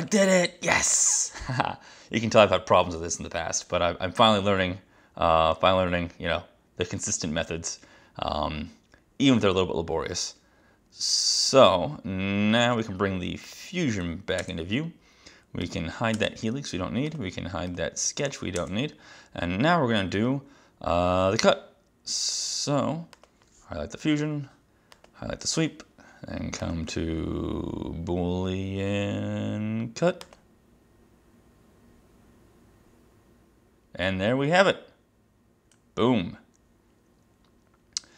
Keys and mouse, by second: 14.4 space, 15.7 click, 16.2 space, 17.1 click, 17.7 click, 18.3 click, 18.6 space, 23.2 click, 25.0 click, 26.7 click, 30.4 click.